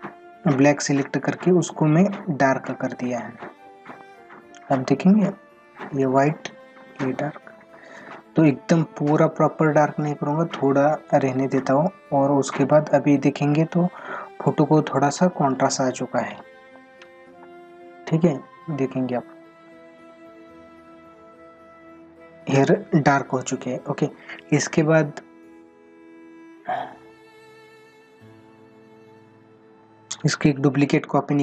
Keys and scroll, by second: 26.7 ctrl+-.